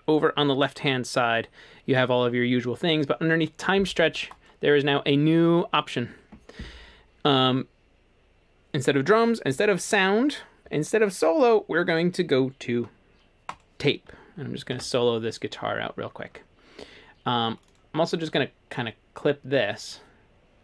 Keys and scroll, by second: 14.8 s.